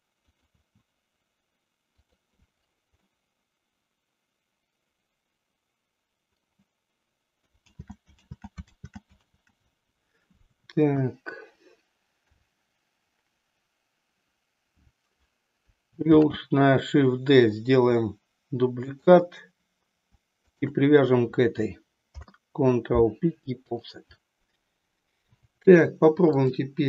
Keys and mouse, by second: 0.4 click, 2.1 click, 3.2-6.6 middle drag, 7.7 ctrl+z, 8.3 ctrl+z, 8.8 ctrl+z, 10.8 KP_1, 12.2 KP_3, 16.2 shift+d, 20.3 shift+click, 22.1 ctrl+p, 26.3-26.8 drag.